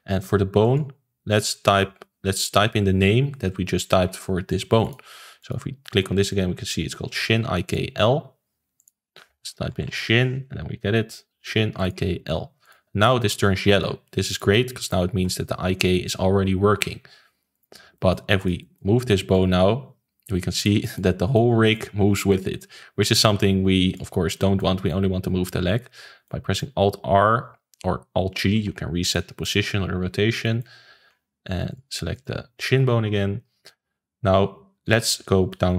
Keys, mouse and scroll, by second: 0.6-3.8 drag, 5.4 click, 7.6 click, 8.7-11.8 drag, 12.6 click, 13.0-17.3 middle drag, 17.5 click, 17.9-18.4 middle drag, 18.4 click, 18.6-19.3 middle drag, 19.3 click, 20.8 middle click, 21.0 scroll down 2, 21.3 middle click, 22.3 click, 24.5-27.4 middle drag, 27.4 alt+r, 28.5 alt+g, 29.1-29.9 middle drag, 29.9-30.4 scroll up 1, 30.4-31.6 middle drag, 31.6 click, 32.1 click.